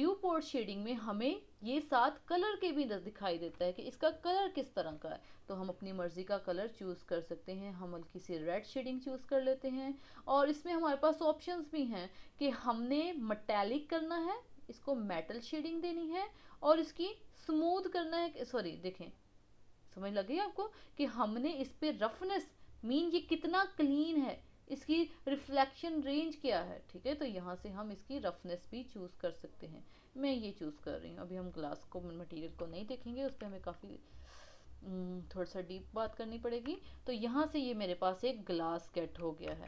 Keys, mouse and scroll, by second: 3.7-5.6 shift+middle drag, 5.6 click, 9.2-10.5 scroll down 3, 10.5-11.7 scroll down 1, 11.7-13.5 scroll down 1, 14.2-19.9 drag, 30.5 scroll down 2, 30.7-33.5 middle drag, 33.8-37.0 middle drag, 37.4-37.9 middle drag, 38.1 scroll, 38.3 scroll down 6, 38.5-39.5 middle drag, 39.5 KP_1.